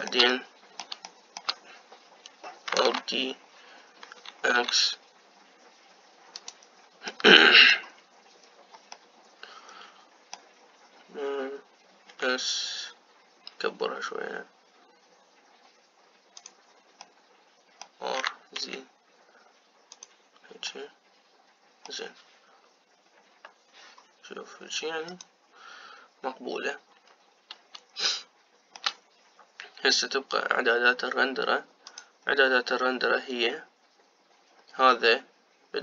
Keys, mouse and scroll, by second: 3.7 alt+d, 7.9-9.2 middle drag, 9.2-9.8 scroll up 2, 9.8-12.9 middle drag, 12.9 s, 13.8-15.9 right drag, 17.9-19.0 middle drag, 19.0 r, 21.6-24.0 middle drag, 24.0 KP_0, 25.9-27.9 drag, 27.9-28.9 scroll up 2, 28.9-32.7 shift+middle drag, 32.7-35.7 drag.